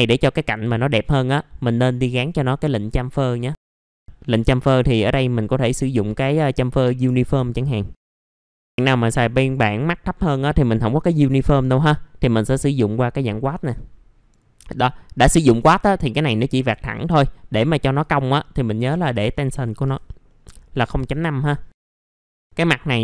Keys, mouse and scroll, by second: 1.6 click, 2.6 middle click, 2.8-3.5 scroll down 1, 3.5-3.8 scroll up 2, 3.6 F4, 3.8 F4, 4.6 click, 8.5 KP_0, 8.6 KP_Decimal, 9.7 middle click, 11.2 click, 13.5 middle click, 14.3-14.8 scroll up 1, 15.6 F4, 17.8 click, 18.8 KP_0, 19.0 KP_Decimal, 19.5 KP_5, 20.2 middle click, 20.9 F4, 21.3-21.8 scroll down 1, 21.9 scroll down 1, 22.0 alt+middle click, 22.2 scroll up 1, 22.3 alt+middle click.